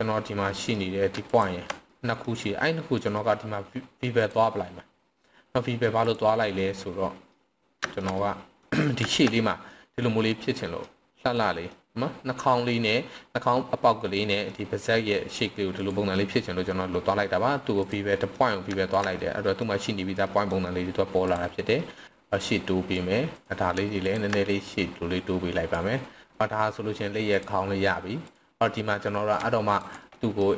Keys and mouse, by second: 0.5 middle click, 1.9-2.2 middle drag, 2.9-4.3 right drag, 6.0 drag, 6.6-7.3 middle drag, 7.9 shift+middle click, 8.2-8.6 middle drag, 9.1 shift+middle click, 9.4-9.7 middle drag, 10.3-10.8 middle drag, 11.4 middle click, 14.5-14.9 middle drag, 16.4-17.2 middle drag, 17.7 click, 18.1 middle drag, 18.9 click, 19.1-19.6 middle drag, 20.2 middle click, 21.3 drag, 21.7 middle click, 22.4 click, 23.3 click, 24.0 shift+click, 24.7-25.7 drag, 26.3-26.9 middle drag, 28.2 click, 28.6 middle click, 29.7 alt+click, 30.0-30.4 middle drag.